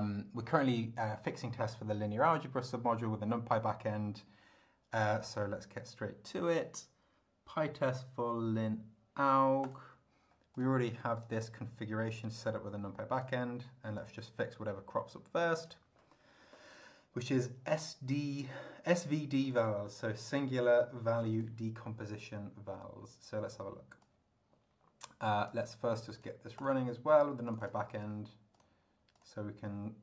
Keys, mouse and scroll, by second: 5.0 click, 9.6 click, 10.6 click, 11.2 click, 13.2 click, 14.0-15.9 drag, 19.4 click, 21.2 click, 24.0-25.7 drag, 26.2 click, 26.6 click, 27.5 click, 28.6 click, 29.1 click.